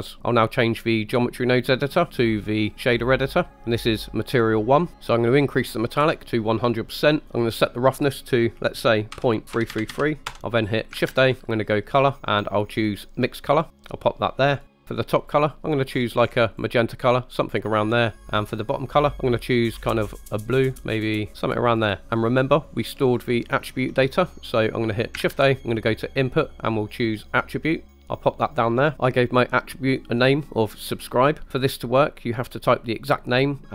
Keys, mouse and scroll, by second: 1.8-3.4 drag, 3.5 scroll up 2, 3.9 middle click, 5.4 click, 7.4-10.3 drag, 9.7 KP_3, 11.1 shift+a, 14.5 click, 15.3 click, 19.0 click, 25.2 shift+a, 28.6 click.